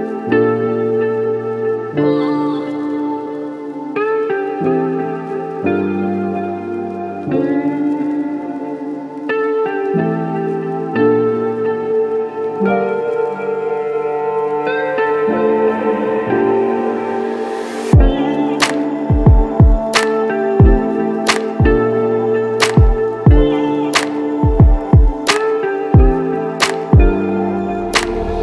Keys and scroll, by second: 0.6-2.1 typing, 2.2 Return, 7.2 [, 10.7 b, 13.0 [, 13.7 ], 15.5 b, 27.1 ctrl+d.